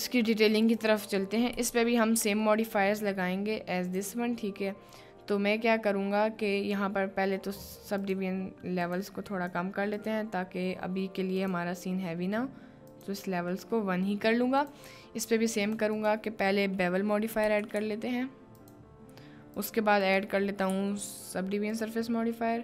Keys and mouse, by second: 0.6 click, 1.5 KP_Decimal, 2.3 middle click, 3.8 click, 8.0-9.3 drag, 9.9 click, 11.4 click, 12.9 click, 13.8-14.3 middle drag, 14.5 click, 15.6-18.8 drag, 19.5-21.9 drag.